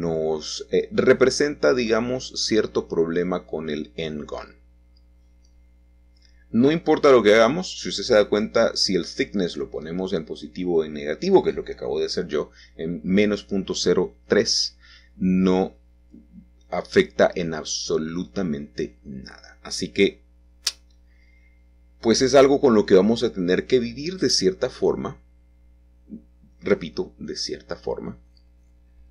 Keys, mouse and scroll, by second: 0.1 click, 2.7 Home, 3.4 -, 3.9 Return, 5.4-10.6 middle drag, 13.2 Tab, 13.9-15.7 middle drag, 16.0 click, 16.7 click, 17.4-18.7 middle drag, 20.9-22.3 drag, 22.4-23.9 shift+drag, 25.1 shift+click, 28.2 middle click.